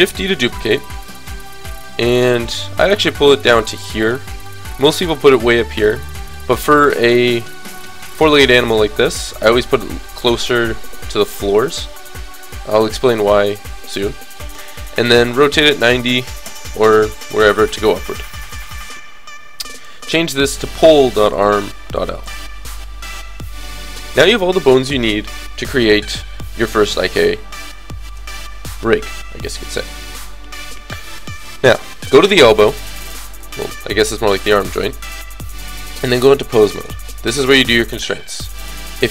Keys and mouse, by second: 0.4-4.4 middle drag, 0.4 shift+d, 5.4 g, 6.6 click, 9.3 g, 11.6 click, 14.3 r, 18.3-21.7 drag, 19.7-21.4 middle drag, 21.7-23.9 middle drag, 29.6-31.3 drag, 36.3 click, 37.2 middle click, 37.9 a, 38.1 a.